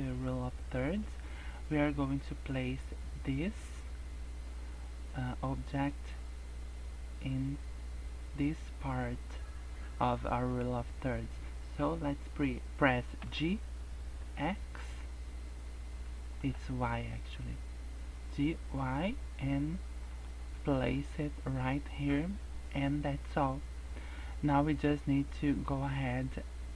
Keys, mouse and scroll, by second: 1.4 scroll up 2, 2.1 scroll down 2, 2.4-4.5 scroll up 2, 4.7-5.1 scroll down 2, 5.2 scroll up 1, 13.2 g, 20.3 scroll down 3, 20.7 shift+middle click, 21.0-21.6 scroll up 5, 21.7-22.0 scroll down 2, 22.0 scroll up 1, 22.4 scroll down 2, 22.6 scroll up 2, 23.9 scroll up 2, 24.2-24.6 scroll down 2, 24.6 scroll up 2.